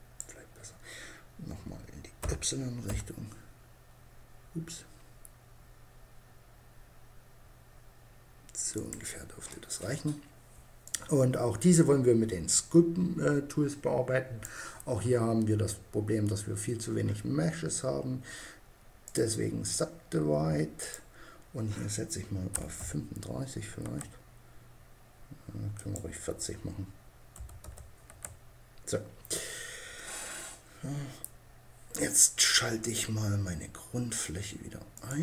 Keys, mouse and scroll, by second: 1.6 s, 8.2-9.9 drag, 11.6 click, 18.5-21.9 drag, 25.3-26.8 drag, 34.4-35.2 drag.